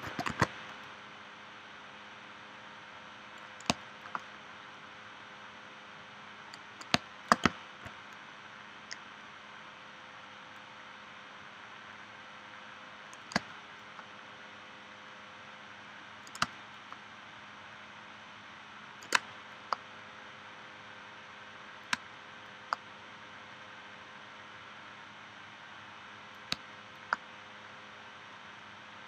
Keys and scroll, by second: 0.0 shift+x, 0.3 shift+c, 3.7 space, 6.9 space, 13.4 space, 16.4 space, 19.1 space, 22.0 space, 26.5 space.